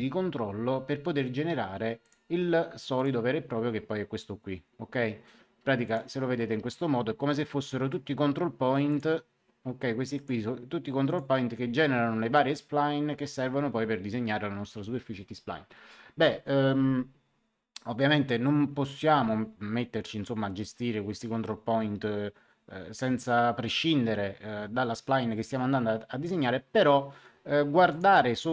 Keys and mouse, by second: 2.0 click, 5.8 click, 8.8 click, 10.1 click, 27.8 click.